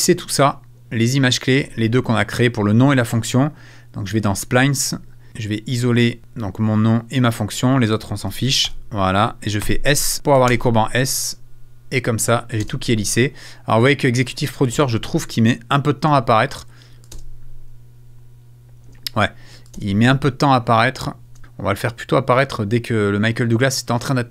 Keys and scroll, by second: 0.0 space, 12.7 space, 14.2 space, 16.0 space, 18.8 space, 21.3 space.